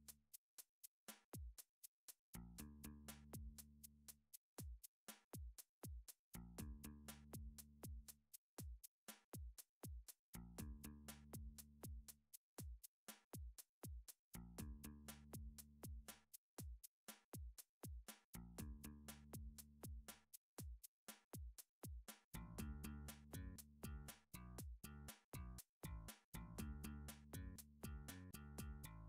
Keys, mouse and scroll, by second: 0.3 click, 1.1 g, 1.9 click, 3.9 d, 5.0 click, 5.6 s, 7.4 click, 8.7 d, 9.3 click, 9.7 e, 10.6 right click, 11.6 ctrl+z, 12.1 r, 13.8 click, 14.6 s, 15.6 click, 16.3 g, 18.2 click, 19.7 d, 21.1 click, 21.7 r, 22.9 click, 23.5 g, 24.5 click, 26.0 s, 26.8 click, 27.3 g, 28.7 click.